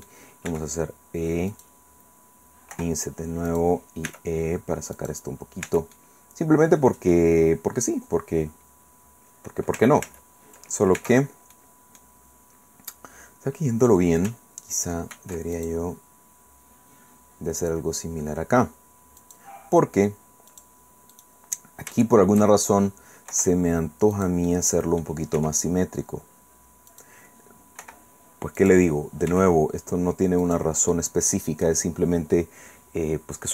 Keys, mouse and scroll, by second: 0.2 scroll up 2, 0.5 e, 1.5 click, 2.7 i, 3.5 click, 4.1 e, 4.9 click, 5.6 Tab, 5.9-7.3 drag, 7.3-8.8 scroll down 2, 8.8 scroll down 1, 8.9-9.5 scroll up 2, 10.0 ctrl+z, 11.0 ctrl+Tab, 11.5 click, 12.2 middle click, 15.1 ctrl+r, 15.5 ctrl+click, 19.2 click, 20.5 click, 21.9 shift+right click, 23.3 i, 24.1 click, 24.9 middle click, 25.4 e, 26.9 click, 27.8 i, 28.6 click, 29.3 e, 30.4 click, 30.9 click.